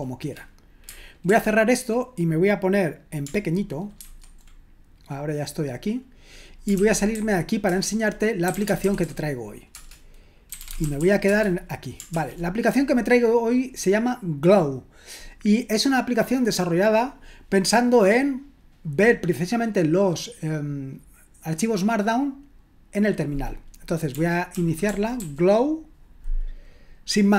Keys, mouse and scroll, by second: 1.3 ctrl+w, 4.0 ctrl+1, 6.9-11.5 typing, 7.7 Return, 12.1 ctrl+l, 23.9-25.6 typing.